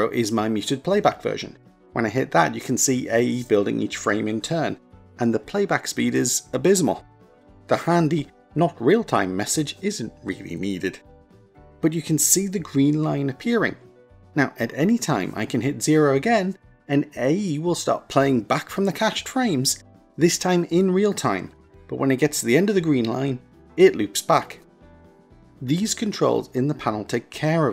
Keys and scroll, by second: 1.9 KP_0, 16.8 KP_0.